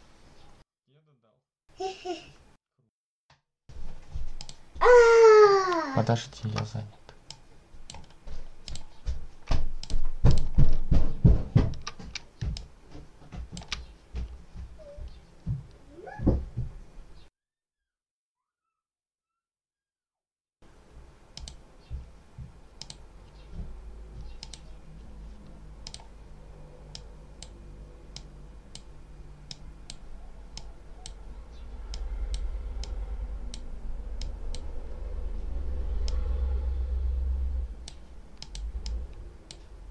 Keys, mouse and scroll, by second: 4.2 click, 6.3 alt+5, 7.2 click, 8.6 click, 9.7 click, 10.2 click, 10.8 ctrl+scroll down 2, 12.4-13.6 ctrl+drag, 21.2 click, 22.7 click, 24.3 click, 25.7 click, 26.8 click, 29.4 click, 30.4 click, 31.8 click, 34.1 click, 36.0-38.0 drag, 38.3 click.